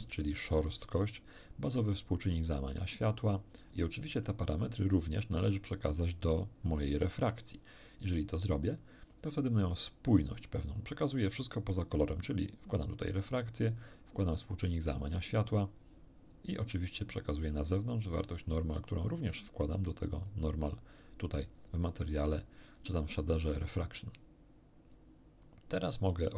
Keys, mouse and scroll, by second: 1.9-3.2 drag, 3.7 middle click, 4.5 scroll down 1, 5.2 middle click, 8.5-9.3 drag, 11.4-13.3 drag, 14.5-15.7 drag, 17.3-18.4 drag, 19.1-20.5 drag, 21.5 click, 22.5 click, 23.9-25.1 drag, 25.4 click.